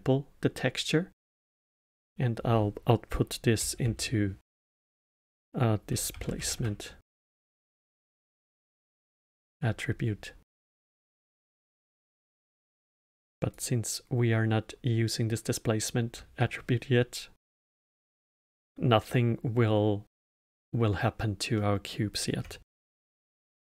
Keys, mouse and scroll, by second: 1.7-4.8 drag, 10.8-12.8 middle drag, 12.8-15.8 drag, 16.3-19.3 drag, 21.5-22.8 middle drag, 22.8 shift+a.